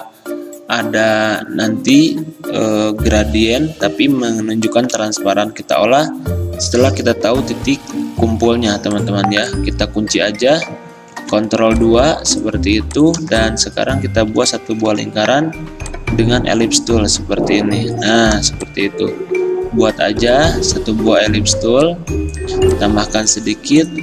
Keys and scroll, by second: 11.3 ctrl+2, 13.4 i, 20.2 v.